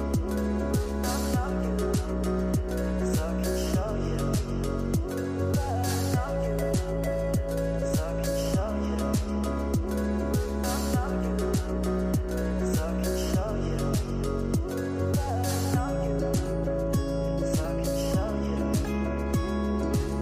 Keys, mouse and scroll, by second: 1.3 click, 2.7 scroll up 2, 3.8-6.7 drag, 6.7 space, 6.9 space, 7.7 scroll up 2, 8.4-8.9 shift+middle drag, 8.9 scroll up 2, 9.5-12.7 typing, 13.5-13.9 scroll down 6, 14.8 shift+middle click, 15.7 scroll down 2, 19.0 click.